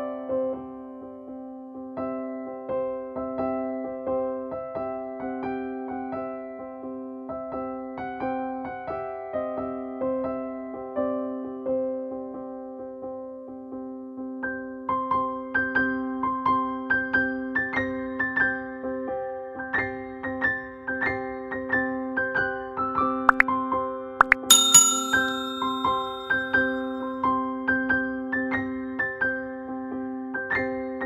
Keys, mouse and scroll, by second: 0.5 s, 2.8 click, 3.4 ctrl+space, 3.5 ctrl+click, 3.8 ctrl+space, 4.4 click, 4.5 space, 5.4 click, 8.2-10.7 drag, 10.7 space, 16.4-21.2 drag, 28.8 Return, 30.2 click.